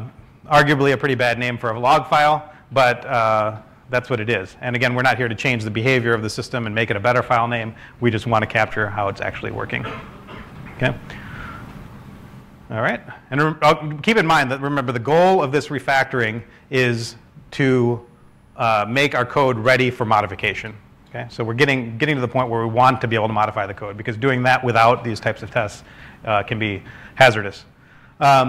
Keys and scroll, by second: 0.0 typing, 17.5-19.7 typing, 20.5 super+s.